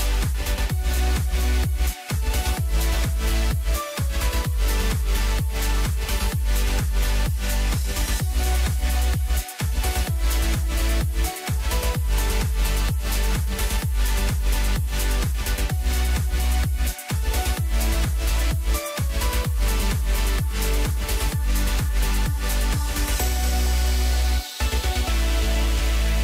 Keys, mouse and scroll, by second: 0.3 click, 1.4 click, 1.7-2.3 middle drag, 2.3 scroll up 2, 2.6-3.4 middle drag, 3.4 click, 4.5-5.6 drag, 8.2-8.5 scroll down 2, 8.5-9.3 middle drag, 9.3 scroll up 2, 9.6-10.3 middle drag, 10.3 click, 11.4-12.5 drag, 17.9 drag, 18.2 scroll down 2, 18.4-20.4 middle drag, 20.4 click, 20.7-21.6 scroll up 2, 21.6 click, 22.7-23.8 drag.